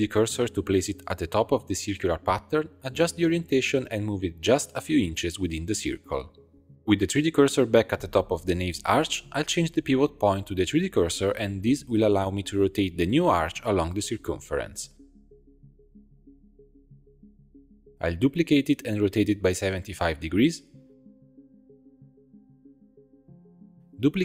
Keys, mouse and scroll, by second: 0.4 Tab, 1.5 click, 2.3 shift+s, 3.5 a, 3.9 r, 4.9 shift+middle click, 5.0 g, 6.8 click, 7.0 shift+s, 8.5 Tab, 9.5 click, 10.6-12.3 drag, 12.3 Tab, 13.4 r, 18.2 shift+d, 19.9 r, 23.6 click.